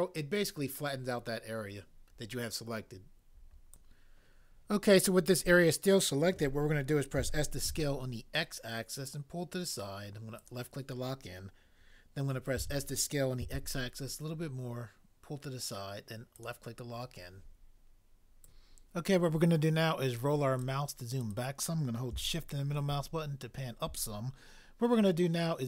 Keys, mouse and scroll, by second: 7.0-8.1 typing, 12.6 s, 13.5 x.